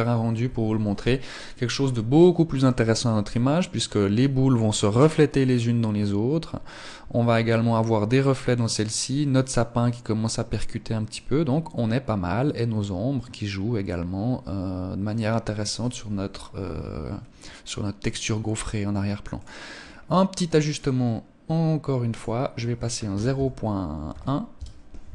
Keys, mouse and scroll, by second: 17.0 Escape, 17.7 right click, 19.1 click, 19.5-19.9 scroll down 5, 20.5 click, 21.9 click.